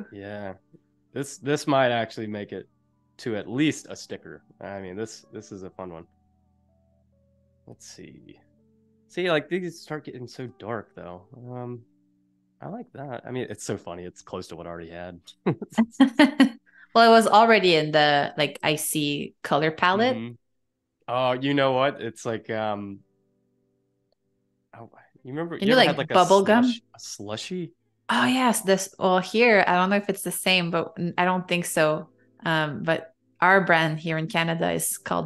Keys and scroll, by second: 14.3 space, 28.1-30.1 typing, 30.8 Return.